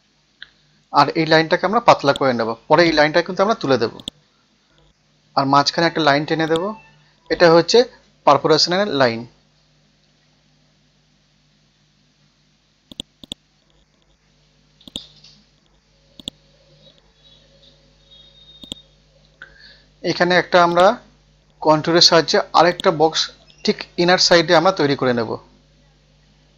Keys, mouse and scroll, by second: 0.0 Tab, 0.2 KP_1, 2.0-5.1 drag, 6.4 ctrl+click, 7.4 F12, 7.8 Tab, 7.9 KP_3, 8.1 Tab, 9.2 typing, 10.3 Return, 12.9 click, 13.8 scroll down 1, 15.0 click, 15.3-16.2 scroll up 1, 16.2 click, 16.6-18.6 scroll up 1, 18.6 click, 24.2 KP_5.